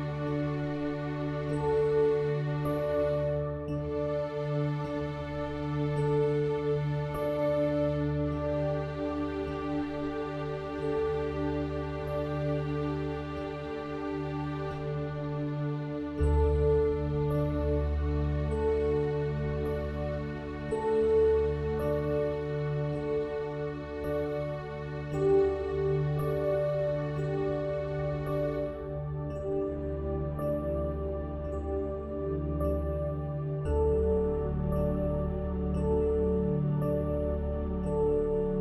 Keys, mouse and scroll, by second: 0.1 ctrl+s, 2.1 click, 3.0 middle click, 3.4 KP_1, 3.8 alt+c, 4.8 middle click, 8.6 Tab, 10.1 ctrl+r, 12.0 click, 12.5 click, 12.8 ctrl+KP_Add, 13.4 ctrl+KP_Subtract, 14.2 s, 15.4 ctrl+r, 16.0 ctrl+r, 17.6 ctrl+r, 18.6 click, 20.4 click, 20.8 g, 21.7 g, 22.6 click, 22.9 g, 24.4 click, 25.1 e, 26.6 s, 27.1 ctrl+r, 27.7 ctrl+z, 29.0 ctrl+r, 31.0 ctrl+r, 32.7 click, 32.9 g, 34.7 click, 35.6 e, 36.3 ctrl+r, 37.2 ctrl+r, 38.3 Tab.